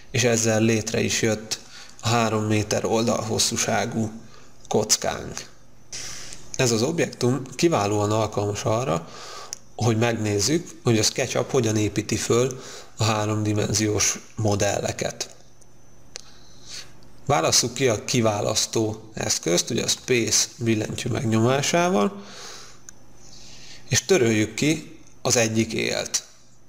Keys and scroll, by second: 21.1 space.